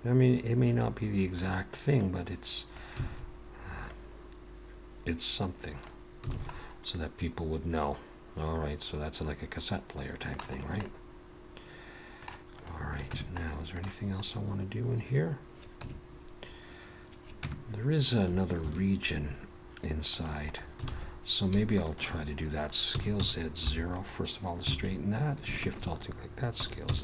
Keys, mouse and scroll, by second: 2.3 click, 3.9 click, 6.3 alt+a, 6.5-7.2 scroll down 3, 7.2 middle click, 10.6-11.2 scroll up 2, 10.9 middle click, 12.5 click, 13.2 Tab, 13.4 middle click, 14.2-14.7 scroll up 2, 15.9 Tab, 17.5 Tab, 18.6 ctrl+r, 20.9 alt+a, 21.8 alt+shift+click, 22.9 s, 24.7 alt+a, 25.6 alt+shift+click, 26.6 s.